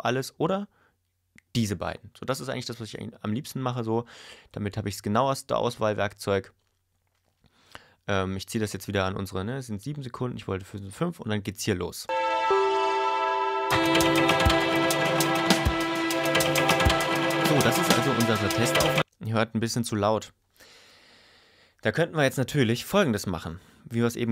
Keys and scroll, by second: 12.1 space, 19.0 space.